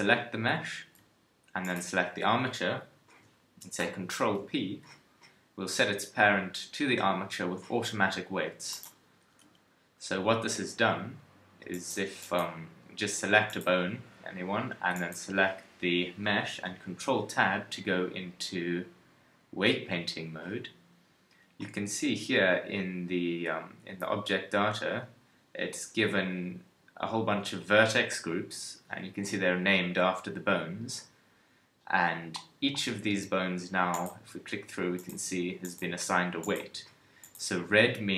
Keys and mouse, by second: 3.8 ctrl+p, 9.4 KP_1, 12.9 ctrl+Tab, 16.9 ctrl+Tab, 32.5-38.1 middle drag.